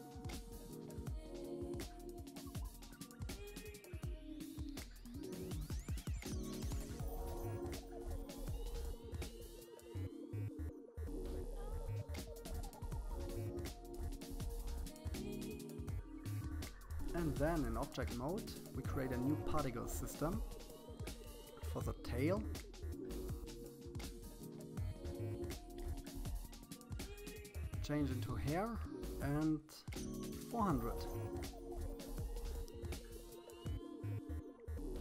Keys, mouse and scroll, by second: 2.2 click, 3.2-4.5 middle drag, 4.5-5.0 scroll up 3, 5.0-6.6 middle drag, 7.4 click, 8.4 middle click, 9.0 middle click, 9.2 click, 9.5 click, 9.6 middle click, 9.8 scroll up 3, 10.2 click, 10.3 middle click, 11.0 click, 11.2 middle click, 12.3 click, 12.5 middle click, 13.1 click, 13.3 middle click, 14.1 click, 14.3 middle click, 14.8 click, 15.1 click, 15.4 middle click, 15.5 scroll down 3, 15.6 middle click, 15.9 click, 16.2 click, 16.9-18.0 middle drag, 18.0 click, 19.0-20.6 drag, 22.0-23.8 drag, 26.9 click, 28.0-29.1 drag, 29.1 0, 33.6-35.0 drag.